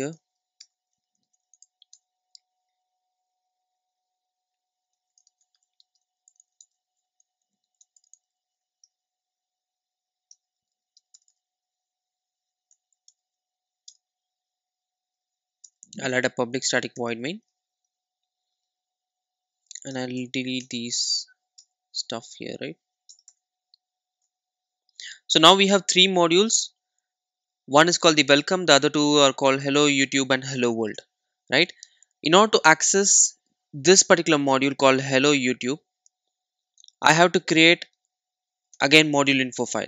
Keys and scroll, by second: 12.8 alt+Return, 17.1 Tab, 20.5 Tab, 20.6 Delete, 38.8 super+n.